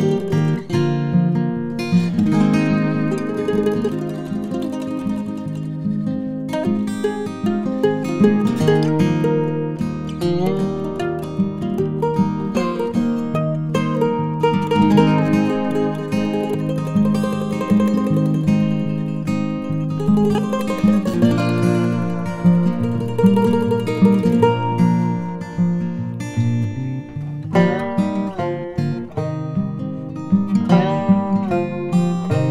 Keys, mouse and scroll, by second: 1.1 Tab, 2.8-5.1 typing, 4.6 Tab, 8.0 super+z, 8.9 r, 12.1 middle click, 13.4 s, 16.1 ctrl+KP_3, 18.6 shift+middle click, 20.9 middle click, 21.7 ctrl+KP_3, 22.7 g, 28.1 right click, 28.3 right click, 28.6 right click, 28.9 right click.